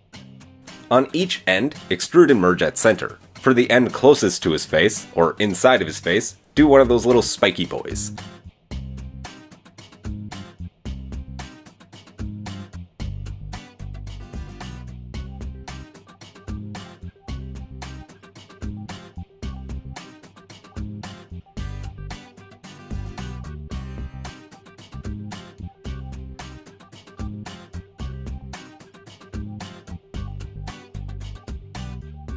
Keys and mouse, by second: 0.4 m, 2.7 alt+middle click, 2.9 alt+click, 5.2 e, 6.3 m, 7.3-10.2 middle drag, 7.3 g, 8.9 Tab, 10.2 click, 10.3-11.9 middle drag, 11.9 click, 12.0 middle click, 12.6 click, 12.7-14.7 middle drag, 12.9 Tab, 13.3 Tab, 13.7 Tab, 14.7-15.3 drag, 17.2 click, 21.8 g, 26.0 click, 26.3 g, 27.6-29.7 middle drag, 29.7 click, 29.8-32.3 middle drag, 30.2 Tab.